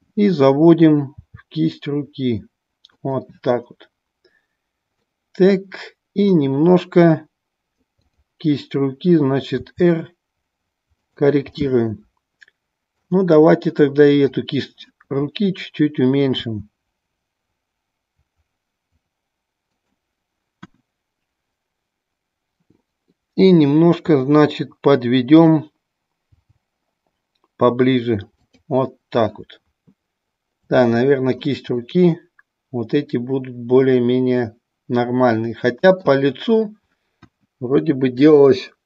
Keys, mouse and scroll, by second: 1.1 r, 3.0 click, 5.1-6.4 middle drag, 8.0-9.2 drag, 9.6 r, 11.0 click, 11.6-13.1 middle drag, 16.4 s, 19.7 click, 25.2 click, 26.3 g, 28.5 click, 30.8-31.4 middle drag, 30.8 scroll up 1, 31.3 scroll down 1, 31.7-32.7 middle drag, 31.7 scroll up 1, 32.9-36.1 middle drag, 32.9 scroll up 1.